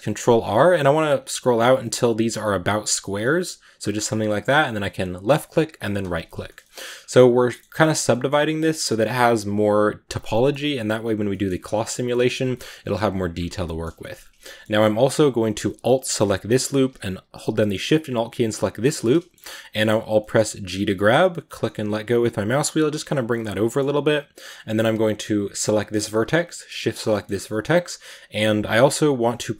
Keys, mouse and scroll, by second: 6.3 shift+middle click, 6.7 scroll up 2, 7.4-14.2 middle drag, 14.2-14.7 scroll down 2, 14.3-14.6 middle drag, 15.9 alt+right click, 18.6 alt+shift+right click, 19.1 scroll up 1, 19.3-20.8 middle drag, 20.8 g, 23.1-25.3 middle drag, 25.3 right click, 26.7 shift+right click, 26.9 shift+middle click, 27.1 scroll up 2, 27.3 middle click, 28.0-29.5 scroll down 1.